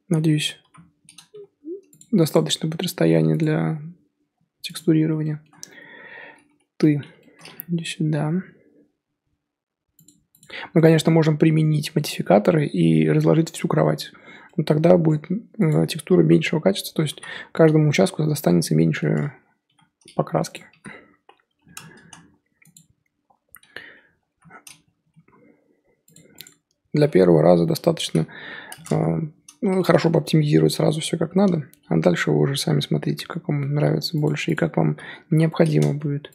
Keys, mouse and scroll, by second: 0.6 l, 1.3 g, 3.4 click, 4.8-6.7 scroll down 1, 6.7 l, 7.7 g, 10.4 click, 10.8-15.7 middle drag, 15.7 click, 17.1 l, 17.8-19.6 middle drag, 19.6 g, 20.7 r, 22.7 click, 24.2 l, 25.0 g, 26.4 Left, 27.3 l, 28.0 r, 30.3 g, 34.5 Left, 35.2 l, 35.9 g.